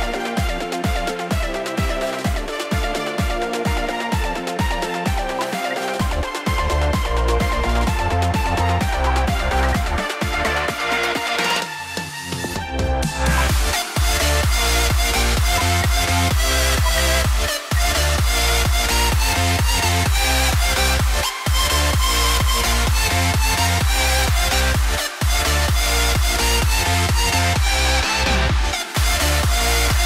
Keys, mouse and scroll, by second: 5.6 shift+Page_Up, 9.2 shift+click, 9.4 typing, 10.3 F2, 13.6 ctrl+k, 15.7 ctrl+z, 16.8 ctrl+z, 17.6 F2.